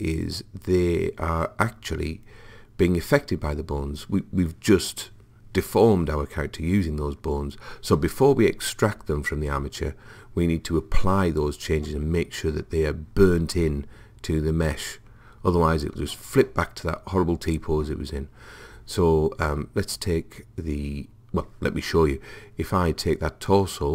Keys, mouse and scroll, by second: 22.8 click.